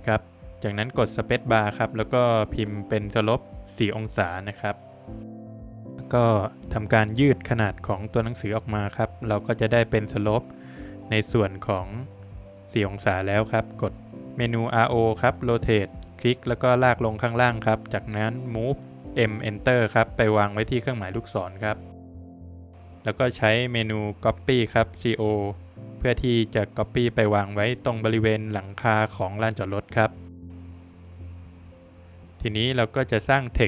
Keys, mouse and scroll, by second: 3.0 shift+y, 3.7 BackSpace, 4.9 shift+ั, 5.2 space, 6.0 Escape, 6.0 click, 6.4 click, 8.6 Escape, 9.0 click, 11.1 Escape, 11.8 Escape, 12.0 click, 12.3 click, 13.8 space, 14.4 click, 15.8 Escape, 16.1 double click, 16.4 click, 17.6 space, 18.0 click, 19.1 click, 19.3 Escape, 19.6-19.9 scroll down 2, 19.9 middle click, 20.6 click, 21.0 double click, 21.6 middle click, 22.8 space, 23.3 click, 24.9 Escape, 25.3 scroll down 3, 25.5 middle click, 27.1 middle click, 29.0 middle click, 29.1 middle click, 29.5 Escape, 31.0 space, 32.3 click, 33.3 click.